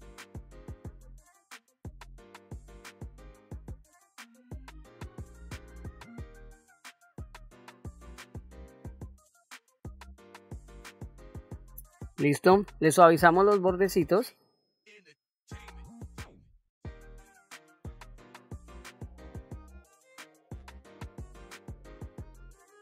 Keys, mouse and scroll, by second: 0.3 click, 1.2 shift+f, 1.7 click, 2.4 click, 2.8 middle click, 3.1-4.2 drag, 4.2 middle click, 4.6 KP_1, 4.8 ctrl+middle click, 5.1 shift+middle click, 5.4 click, 6.4 middle click, 6.6 ctrl+middle click, 7.1 shift+middle click, 7.3 ctrl+middle click, 7.6 f, 7.8-9.5 drag, 9.6 middle click, 10.1 click, 10.3 middle click, 10.6 click, 10.8 middle click, 12.3 click, 13.0 middle click, 14.2-16.6 drag, 16.8 middle click, 18.3-20.1 drag, 20.4 middle click, 21.8 click, 22.5 middle click.